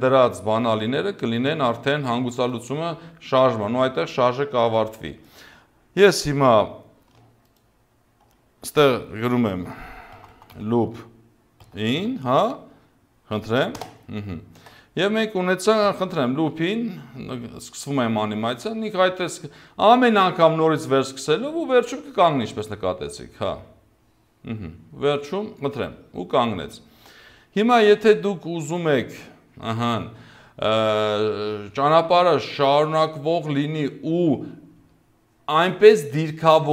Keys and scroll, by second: 9.5-12.0 typing, 13.8 Return, 15.9 0, 26.5 0.